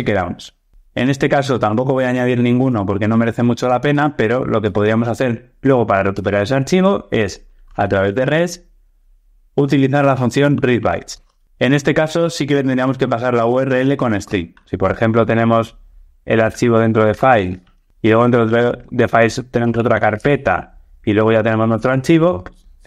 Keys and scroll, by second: 11.0 Return, 21.6 Tab.